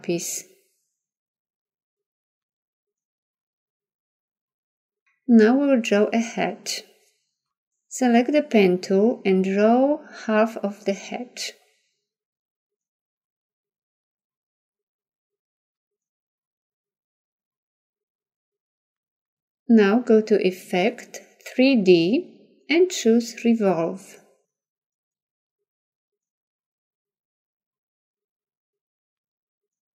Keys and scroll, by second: 0.4 ctrl+d.